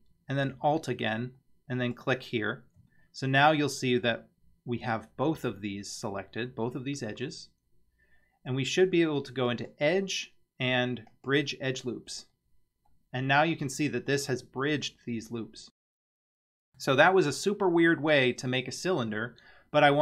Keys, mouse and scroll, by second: 1.8 alt+shift+click, 9.5-11.3 drag, 12.9-14.3 middle drag, 16.3-16.9 middle drag.